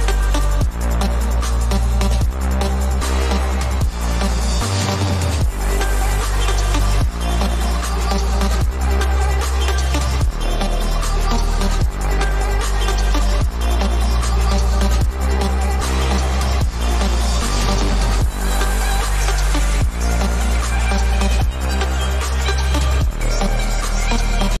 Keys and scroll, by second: 1.8 ctrl+u.